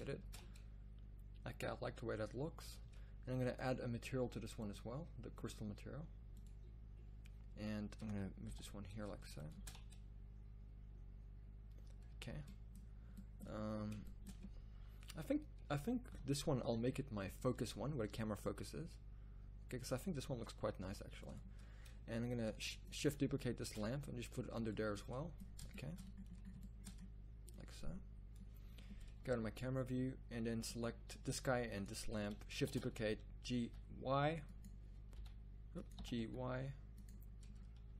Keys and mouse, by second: 0.4 shift+z, 2.7 z, 2.8 z, 8.4 g, 9.7 shift+z, 12.1 z, 12.3 z, 16.1 KP_0, 18.8 g, 20.8 r, 23.6 shift+d, 27.5 drag, 27.8 middle click, 29.3 KP_0, 32.6 shift+d, 35.2 y, 36.0 g.